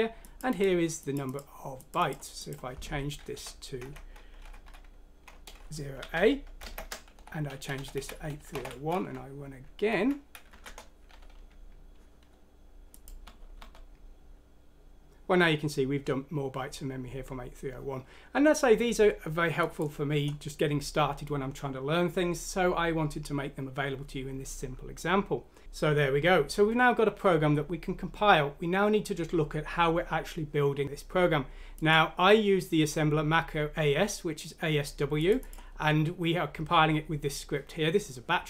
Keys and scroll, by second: 3.4 Down, 6.0-8.6 typing, 7.9 Escape, 9.2 F5, 9.9 Escape, 10.4 F6, 10.6 Return, 13.2-13.5 typing.